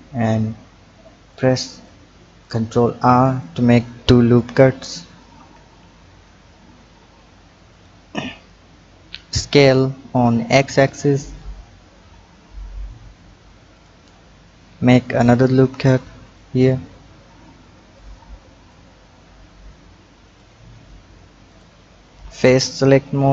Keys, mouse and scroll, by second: 1.1-1.9 drag, 3.0-4.6 drag, 4.6 ctrl+r, 9.3 s, 15.8 ctrl+r, 18.7 click, 21.5 click, 23.2 click.